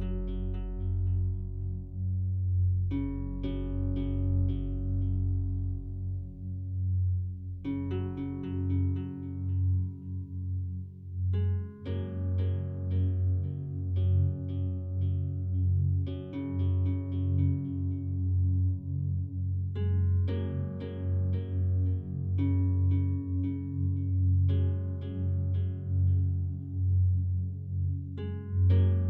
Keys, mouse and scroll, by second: 0.7 click, 1.9 click, 3.7 click, 4.5 click, 6.7 click, 8.0 click, 8.2 click, 9.9 click, 10.1 click, 11.0 click, 11.2 click, 15.6 click, 15.9 click, 17.8 click, 17.9 click, 19.9 click, 21.0 click, 23.2-23.9 drag, 24.8 click, 25.5-26.9 drag, 27.2 click, 28.2-29.0 drag.